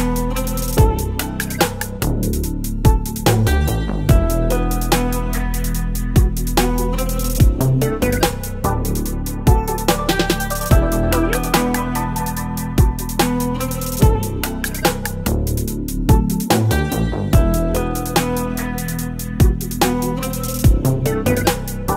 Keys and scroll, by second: 0.6 space, 2.5 ctrl+t, 3.3 Return, 3.5 space, 4.3 ctrl+alt+t, 6.4 Return, 7.2 ctrl+j, 8.1 space, 9.1 Delete, 9.3 v, 9.6 space, 10.6 space, 13.4 Return, 14.3 space, 15.1 space, 18.4 ctrl+BackSpace, 18.7 ctrl+d, 19.1 space.